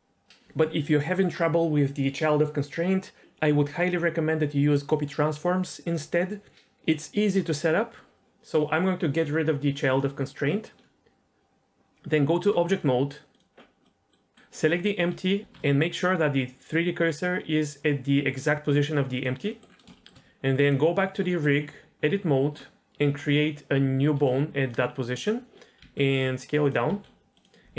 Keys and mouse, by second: 10.5 middle click, 11.4 Tab, 11.9 Tab, 13.3 click, 13.8 middle drag, 15.1 shift+s, 15.4 shift+s, 19.5 middle click, 19.9 shift+middle click, 20.6 click, 21.3 middle click, 21.7 Tab, 23.9 shift+a, 25.8 s, 26.9 s.